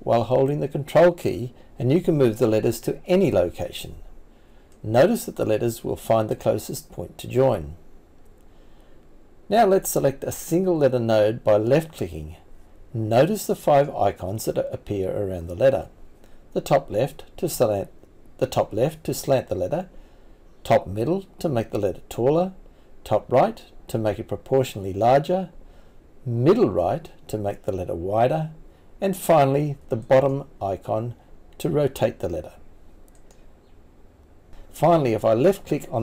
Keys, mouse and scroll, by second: 23.7 click.